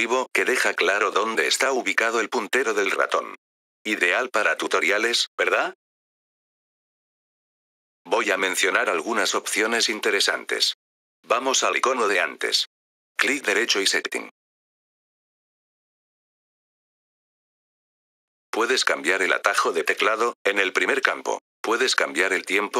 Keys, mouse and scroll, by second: 7.2 F3, 7.6 click, 10.5 click, 11.8 right click, 14.6-15.8 drag, 18.0 click, 19.5 click.